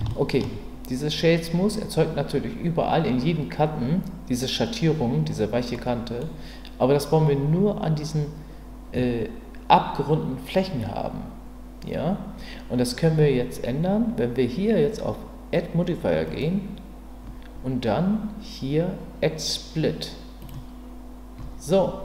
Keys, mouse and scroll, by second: 0.1-0.4 shift+middle drag, 5.7 middle click, 16.2-20.5 drag.